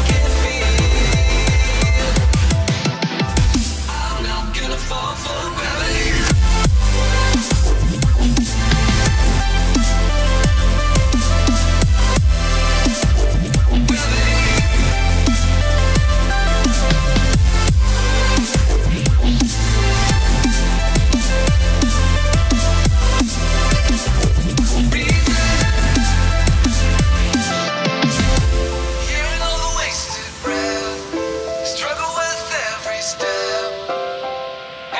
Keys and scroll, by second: 7.1 space, 9.8 space, 12.1 space, 13.2-14.8 typing, 23.8 -, 25.3 space, 26.5 space, 27.8 -, 28.7 space, 29.9 space, 31.1 space, 32.9 -.